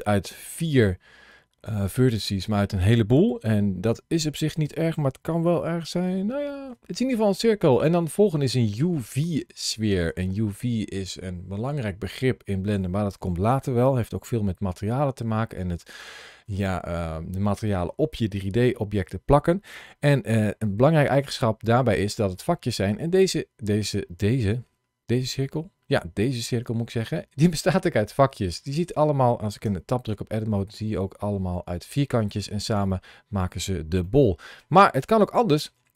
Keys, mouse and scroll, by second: 4.5 Tab, 5.4 shift+middle click, 6.3 middle click, 6.8 middle click, 7.6 click, 8.3 middle click, 9.4-9.9 scroll up 2, 10.1 shift+middle click, 23.5 middle click, 29.5 Tab, 32.4 Tab, 32.8 middle click, 33.9 shift+middle click, 35.2 shift+middle click, 35.8 click.